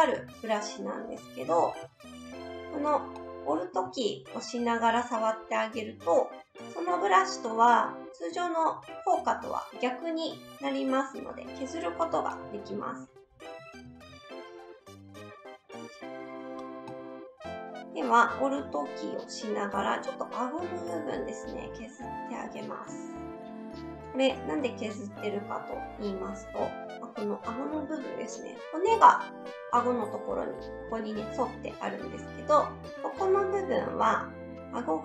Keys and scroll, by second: 1.5 ctrl+z, 1.8 ctrl+z, 12.1 ctrl+z, 12.4 ctrl+z, 26.6 s.